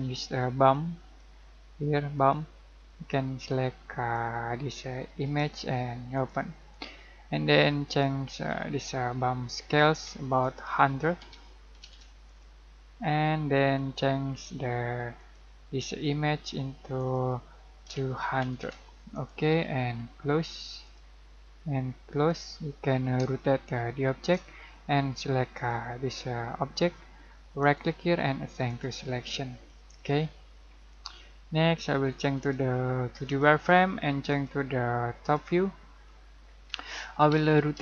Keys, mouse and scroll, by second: 10.5 click, 11.2-12.0 typing, 12.3-15.2 drag, 17.9-18.7 typing, 19.2 click, 22.9 middle click, 23.4 shift+middle click, 24.6 scroll up 1, 25.6 click, 27.6 right click, 28.7 click, 30.0-30.9 scroll down 1, 32.4 click, 36.1 middle click, 37.4-37.8 typing.